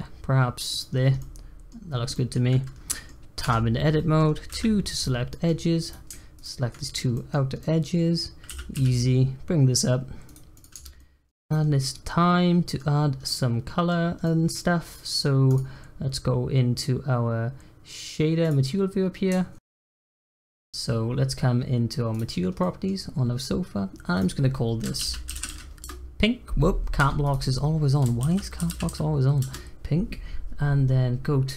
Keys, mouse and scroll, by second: 0.9 scroll down 1, 1.2 middle click, 1.7-2.1 scroll up 1, 2.1 middle click, 2.5 scroll up 1, 2.8 middle click, 3.4 Tab, 3.6 scroll down 1, 3.9 middle click, 4.5 2, 4.9 click, 5.2 middle click, 5.8 click, 6.3 shift+click, 7.1 middle click, 7.3 scroll down 2, 7.6 middle click, 8.5 e, 10.5 click, 10.7 Tab, 10.9-11.4 middle drag, 11.4 drag, 11.7-12.9 middle drag, 12.9-13.2 scroll up 1, 13.2-13.9 middle drag, 13.9-14.2 scroll up 1, 14.2-15.4 middle drag, 15.4 click, 21.1 scroll up 2, 22.2 click, 22.6-24.1 middle drag, 24.1-27.0 drag, 27.2-30.2 drag.